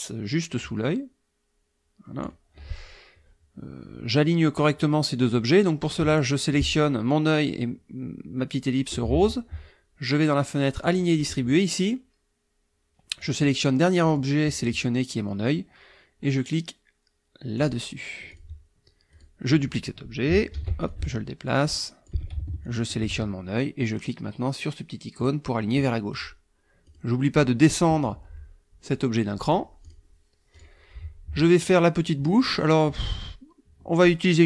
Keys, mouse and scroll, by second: 0.9 click, 6.1 shift+click, 10.8 click, 13.2 click, 14.0 click, 17.6 click, 18.3 click, 19.1 click, 20.5 ctrl+d, 20.9-22.3 ctrl+drag, 22.6 ctrl+shift+click, 25.2 click, 26.1 click, 26.8 click, 29.4 click, 29.8 click, 30.5 click.